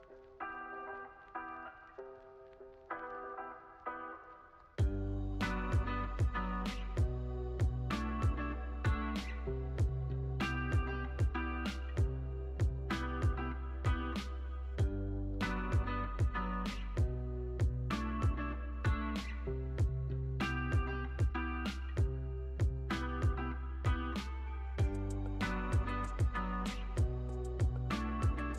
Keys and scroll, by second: 1.9 z, 6.4 t, 8.2 x, 9.8 z, 10.3 x, 11.3 o, 13.0 z, 13.9 x, 15.3 super+-.